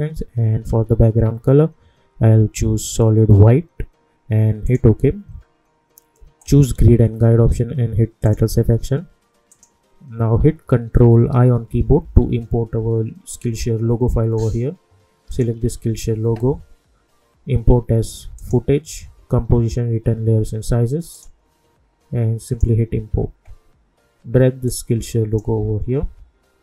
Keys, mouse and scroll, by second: 4.6 click, 11.4 ctrl+i, 15.3 click, 18.3 click, 21.1 click, 24.7-26.6 drag.